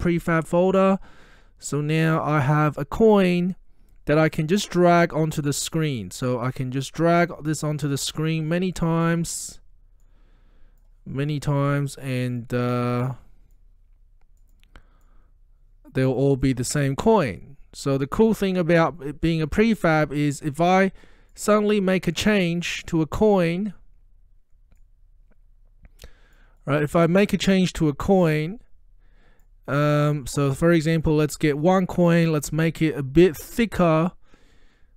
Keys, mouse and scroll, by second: 4.4-5.3 middle drag, 7.1-8.8 drag, 18.6-21.1 middle drag, 21.4 click, 22.7-23.6 middle drag, 24.8-27.3 drag, 26.7 middle click, 27.9-29.7 drag.